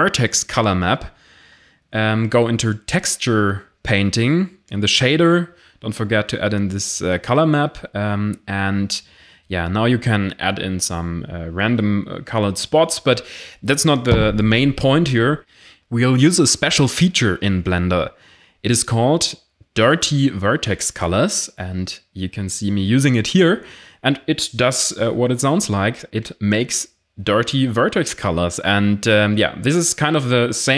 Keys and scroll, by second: 2.7-3.5 typing, 3.8 Return, 6.0 ctrl+z.